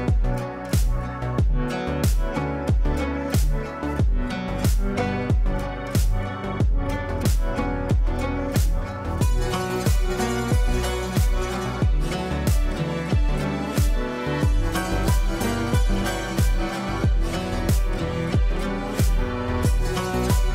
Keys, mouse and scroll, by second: 0.6 F2, 0.8-1.5 drag, 6.4-10.9 drag, 12.7-18.2 drag, 18.6 space, 19.7 scroll down 1.